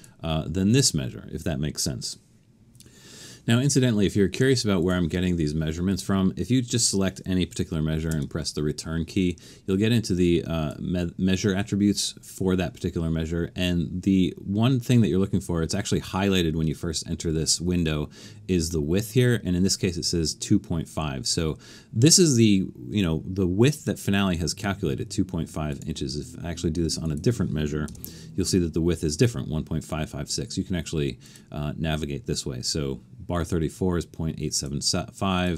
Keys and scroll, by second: 8.1 Return, 27.9 Return.